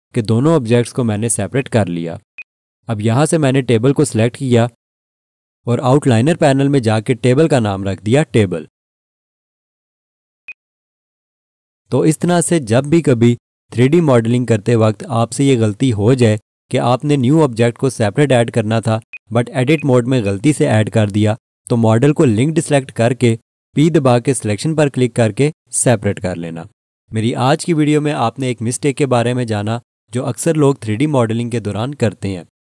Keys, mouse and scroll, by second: 6.8 click, 6.8 F2, 7.5-8.2 typing, 8.6 Return, 10.5 click, 15.3 scroll down 1, 16.2 alt+click, 17.6 click, 20.2 double click.